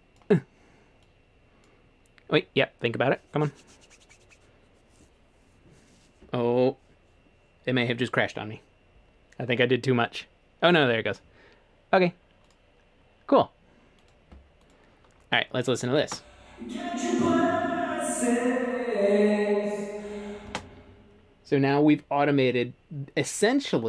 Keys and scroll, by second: 16.0 space, 20.5 space.